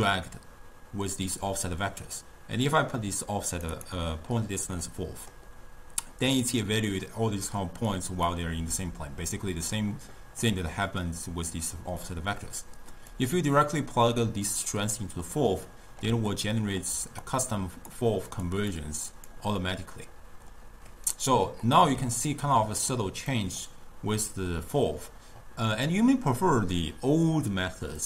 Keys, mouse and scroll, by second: 1.8 click, 2.7 drag, 4.1 click, 4.9-6.4 middle drag, 6.4 d, 8.0 click, 8.8-9.4 d, 10.8-13.2 middle drag, 13.2 click, 15.8 scroll down 1, 15.8-17.3 middle drag, 17.3 drag, 18.4 click, 18.8-19.7 drag, 19.7-23.4 middle drag, 23.4 click.